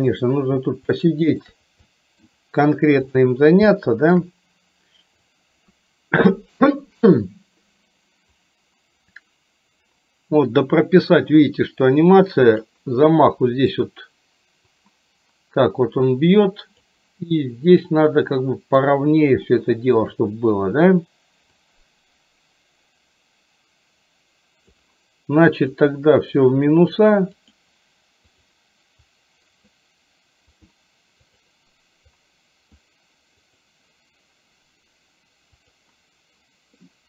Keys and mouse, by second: 1.0 shift+middle click, 2.0 middle click, 3.2 click, 3.7 shift+middle click, 5.4-6.7 drag, 8.5-12.8 drag, 13.1 middle click, 14.8-16.8 drag, 17.4-18.8 middle drag, 19.5 shift+middle click, 21.6-24.8 drag, 25.8 click, 27.5 click, 29.2 click, 30.6 click, 32.2 click, 33.5 click.